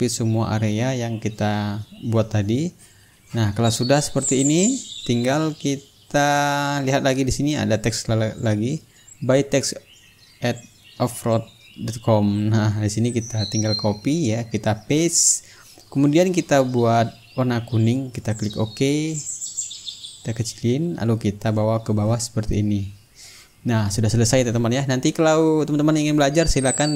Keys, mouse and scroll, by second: 3.2-5.4 drag, 5.7 click, 6.9 click, 8.5-11.2 drag, 11.2 click, 11.8 right click, 12.9 click, 14.2 click, 15.5 ctrl+v, 16.4 ctrl+a, 17.1 click, 18.7-19.9 drag, 20.7 click, 22.3-26.4 drag, 26.9 click.